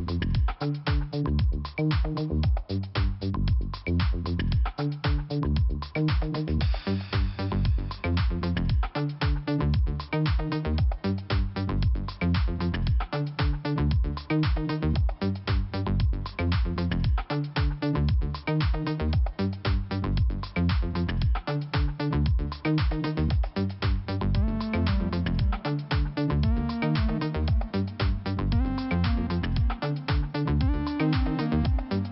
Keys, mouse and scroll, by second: 0.1 scroll down 1, 0.7 scroll up 1, 1.8 click, 1.9 click, 2.7 click, 2.8 click, 3.8 click, 5.7 scroll down 1, 7.3 click, 7.3 click, 10.9 click, 12.3-12.6 scroll up 2, 13.5 click, 13.6 click, 14.3 click, 15.6 click, 17.0 click, 18.6 click, 20.5-21.7 scroll down 2, 23.2 click, 24.5 click, 24.8 click, 25.4-26.5 scroll up 2, 27.9 click, 29.6 click, 29.7 click, 31.0 click.